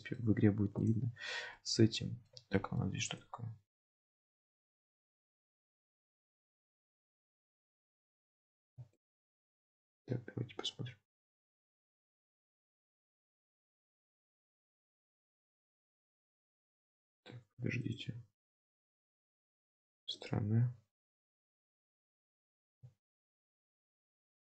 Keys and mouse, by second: 0.1 shift+middle click, 0.9 click, 1.7-2.3 middle drag, 2.7 shift+middle drag, 3.1 click, 7.7 1, 8.1-9.4 middle drag, 10.8 KP_Decimal, 12.0 alt+z, 12.7 alt+z, 13.4 g, 14.5 ctrl+z, 14.7 x, 16.3 middle click, 16.5 ctrl+z, 17.7 2, 18.1 x, 20.0 middle click, 20.7 1, 21.3 middle click, 22.2 2, 22.6 click, 23.7 f.